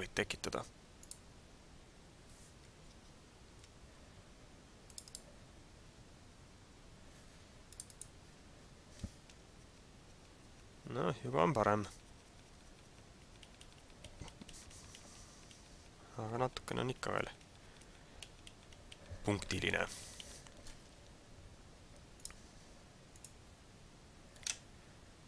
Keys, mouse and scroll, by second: 1.0 click.